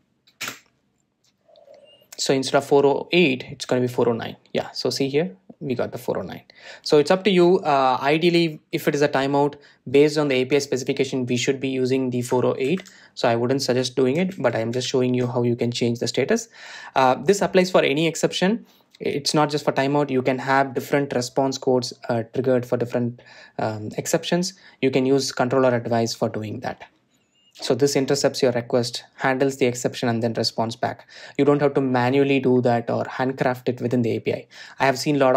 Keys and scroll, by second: 16.0 super+z.